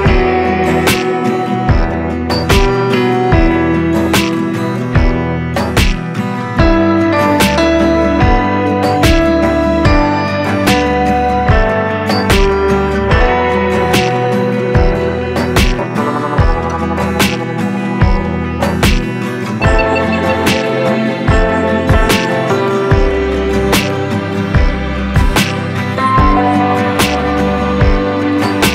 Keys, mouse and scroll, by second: 9.7 ctrl+Num_Lock, 9.7 click, 10.0 ctrl+space, 15.5-20.0 drag, 20.0-26.2 drag, 28.5-28.7 drag.